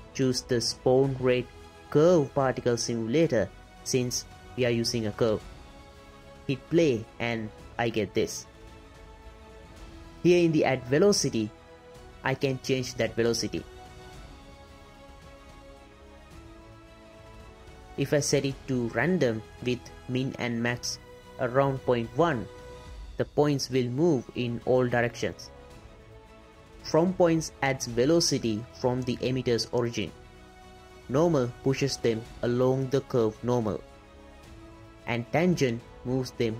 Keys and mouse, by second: 7.1 space, 7.6-8.4 drag, 8.6-8.9 shift+drag, 9.4 click, 10.9 click, 12.1 click, 13.2 space, 14.7 click, 15.9 drag, 16.1 space, 17.4 space, 18.2-19.0 drag, 19.1 click, 20.2 click, 21.8 click, 22.7 click, 23.6 space, 25.0 space, 25.2-26.2 drag, 26.8 click, 27.6 space, 28.8 space, 29.5-29.8 drag, 31.3 click, 31.8 space, 32.8 space, 33.1-34.4 drag, 35.0 click, 35.9 space.